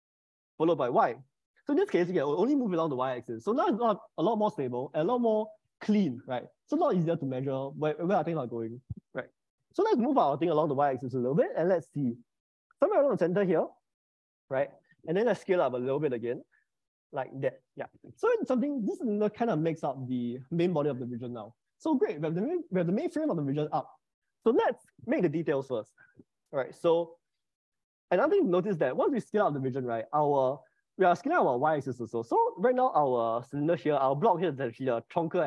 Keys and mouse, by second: 1.0 y, 16.0 s, 32.7-35.4 middle drag.